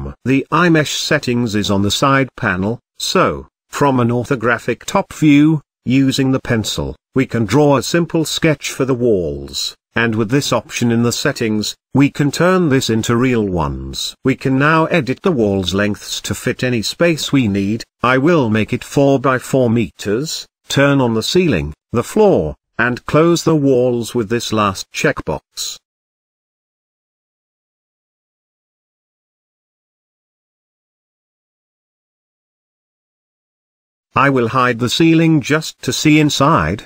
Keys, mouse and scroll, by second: 0.3 n, 1.6 click, 4.6-7.8 drag, 11.5 click, 12.6-14.4 middle drag, 16.1 shift+middle click, 16.4-17.2 scroll up 1, 17.2-19.0 drag, 19.1-23.3 drag, 23.3-24.6 middle drag, 24.6-26.0 scroll up 1, 26.0 click, 27.3 click, 29.7-30.4 drag, 30.8-32.3 middle drag, 32.3 click, 33.0-33.7 middle drag, 33.7-34.5 scroll up 2, 34.5 click, 35.1-35.8 middle drag, 35.8-36.2 scroll up 2, 36.2-36.8 shift+middle drag.